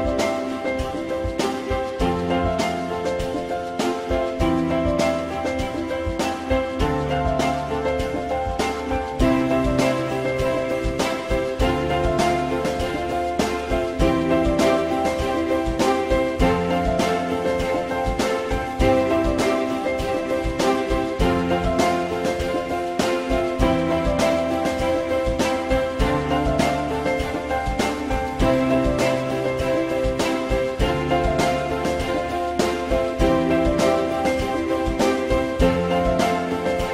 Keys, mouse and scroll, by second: 4.5 alt+middle click, 9.3 alt+middle click, 20.1 alt+middle click, 28.0 alt+middle click, 33.8 F4, 35.3 alt+middle click.